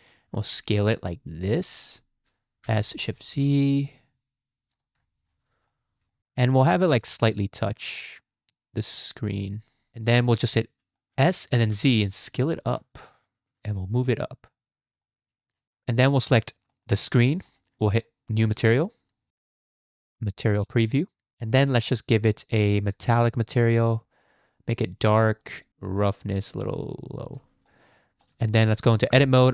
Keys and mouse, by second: 2.6 s, 5.9 click, 6.3 g, 9.9 click, 10.5 drag, 11.0 click, 12.4 s, 13.1 click, 13.5 g, 15.1-15.5 drag, 16.1 click, 16.7 click, 17.0 click, 17.4 shift+click, 18.4 click, 19.3 z, 22.6-23.7 drag, 24.0 click, 26.0-27.4 drag, 27.7 middle drag, 28.2 middle click, 29.1 Tab.